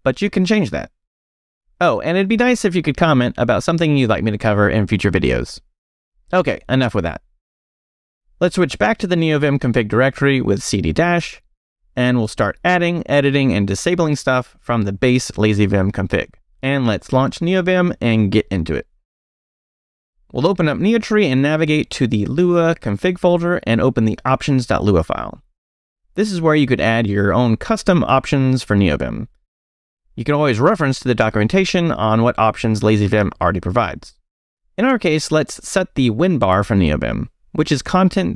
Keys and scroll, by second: 20.5 space, 20.6 e, 21.5 j, 21.7 Return, 23.3 j, 23.6 Return, 24.1 j, 25.2 Return, 26.5 space, 26.6 e, 29.2 j, 29.7 o, 30.8 BackSpace, 34.8-38.3 typing.